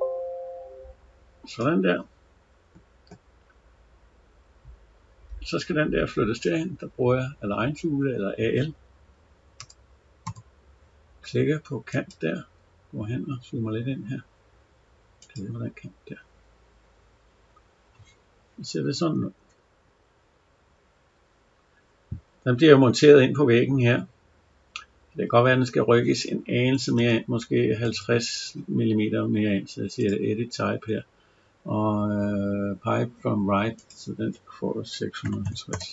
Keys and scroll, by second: 19.2 Escape, 26.6 Escape.